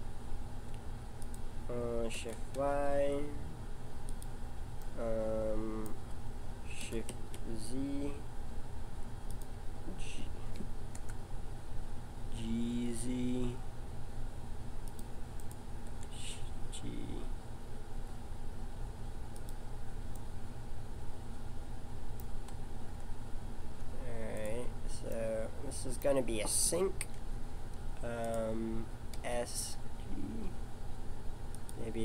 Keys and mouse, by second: 2.1 s, 4.8-6.8 middle drag, 6.8 s, 10.9 KP_1, 12.2 g, 15.4-17.1 right drag, 15.8 g, 20.2-21.4 middle drag, 22.9 Tab, 24.3-27.2 drag, 27.2 e, 29.1 s.